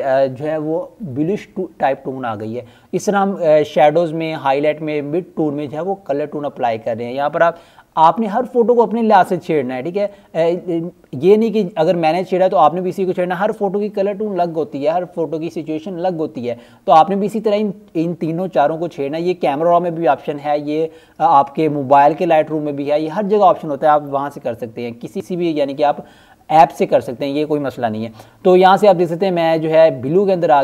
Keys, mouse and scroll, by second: 5.6 click, 12.4 click, 17.1-17.9 scroll up 1, 17.9 click, 19.2-21.4 scroll down 1, 21.4 click, 27.0 click.